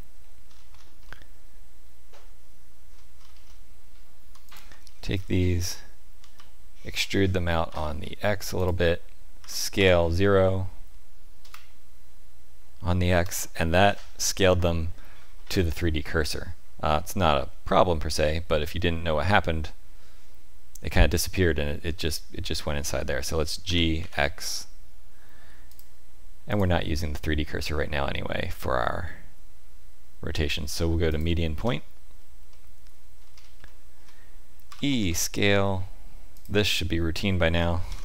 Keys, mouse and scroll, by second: 0.4-1.0 scroll down 6, 1.0 middle click, 3.1-4.3 scroll up 4, 4.4 alt+click, 4.9-5.7 scroll down 3, 5.7-6.2 scroll down 1, 6.2 e, 9.4 s, 18.5 middle click, 22.9 middle click, 23.6 g, 26.4 click, 32.4 middle click, 33.1-33.5 scroll up 4, 33.6 shift+middle click, 34.6 e, 37.8 ctrl+f.